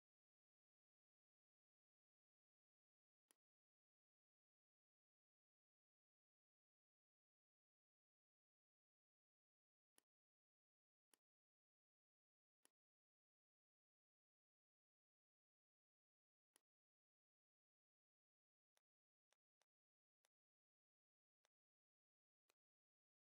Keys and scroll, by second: 0.0 KP_6, 0.1 KP_5, 1.7 Return, 2.5 v, 4.4 /.